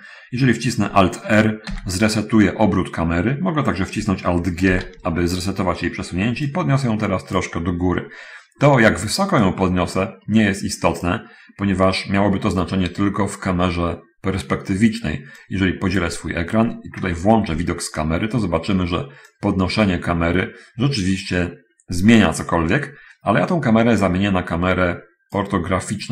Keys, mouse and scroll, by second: 1.7 alt+r, 4.7 alt+g, 6.8-7.9 drag, 8.3 scroll up 2, 8.5-8.9 scroll down 2, 9.6-11.5 drag, 15.5 click, 17.3 0, 19.7-25.7 drag.